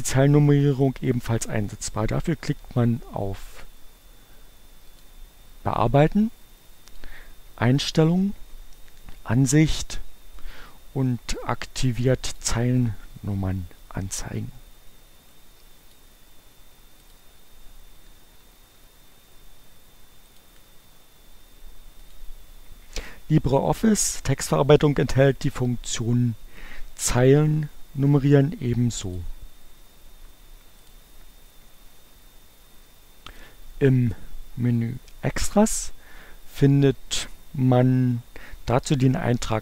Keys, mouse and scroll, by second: 5.0 click, 6.9 click, 12.4 click, 15.4 click, 17.2 click, 18.1 Return, 19.0 Return, 20.4 click, 22.2 click, 29.2 click, 31.0 click, 33.4 click, 35.5 click.